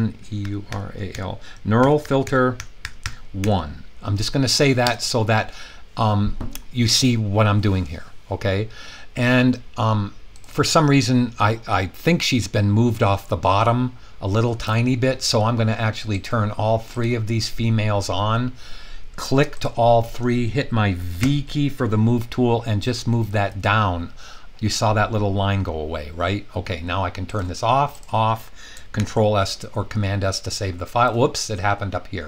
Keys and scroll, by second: 0.0-3.4 typing, 4.8 Return, 21.1 v, 22.6 Down, 23.0 Down, 23.2 typing, 28.9 super+s.